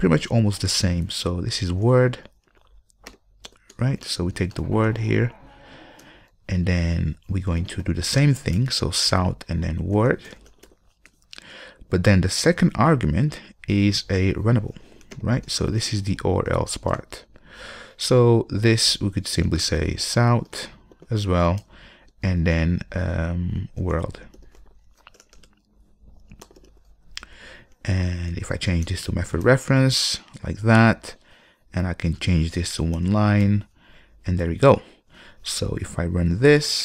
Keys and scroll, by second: 0.0 ctrl+space, 8.8 Return, 21.8 Return, 29.0 alt+Return.